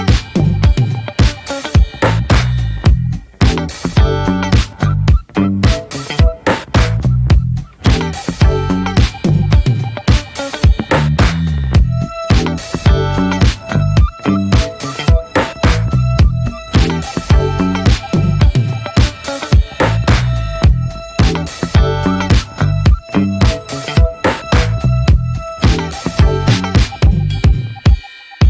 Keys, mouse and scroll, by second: 1.5 middle click, 1.8 Tab, 2.1-2.6 middle drag, 2.6 Tab, 3.4 right click, 4.0 ctrl+s, 4.2-5.4 middle drag, 5.4 2, 5.5-7.6 drag, 7.6-8.5 middle drag, 8.5-9.6 alt+shift+drag, 9.6-10.6 middle drag, 10.6-11.7 alt+shift+drag, 11.7 middle click, 12.6-13.7 alt+shift+drag, 13.7-14.1 middle drag, 14.1-14.8 scroll up 1, 14.8 alt+shift+click, 15.0 scroll down 1, 15.2-15.7 middle drag, 15.7-16.0 scroll up 1, 16.0-16.5 right drag, 16.5 a, 17.1 right click, 17.7 ctrl+s, 18.0 middle click, 18.3 Tab, 18.6 middle click, 18.9 ctrl+s, 19.2 click, 19.6 /, 20.1-20.5 middle drag, 20.5 ctrl+s, 20.6 click, 20.9-21.7 shift+middle drag, 21.7 ctrl+s, 21.9-22.5 middle drag, 22.5 click, 22.8 /, 23.1-23.6 middle drag, 23.6 Tab, 23.9-24.4 drag, 24.4-25.7 middle drag, 25.7 3, 25.8 click, 26.1 middle click, 26.4 click, 27.1 middle click, 27.4 i.